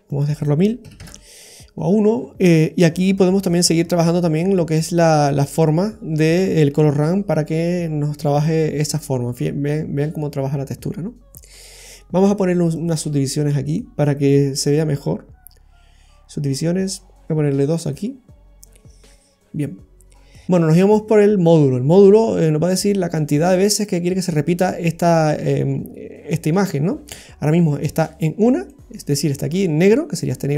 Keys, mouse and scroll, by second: 0.1 click, 2.0 middle click, 3.4 click, 12.7 click, 13.6 click, 17.8 click, 20.1 scroll down 2, 20.3 middle click, 20.4-21.0 scroll up 14, 22.4 middle click, 23.5 middle click, 24.3-24.8 scroll up 1, 27.2-27.5 scroll down 3, 28.5-28.8 scroll down 2, 28.7 middle click.